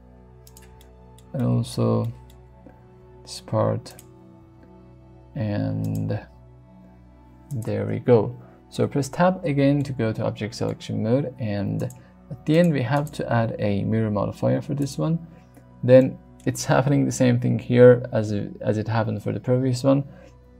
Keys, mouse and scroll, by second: 0.5 click, 0.8 shift+middle click, 1.4 shift+middle click, 2.0 shift+middle click, 2.8 shift+d, 3.9 click, 4.4 r, 5.8 click, 6.1 g, 7.5 click, 8.7 Tab, 9.8-10.7 middle drag, 12.5 click, 16.0-16.4 middle drag.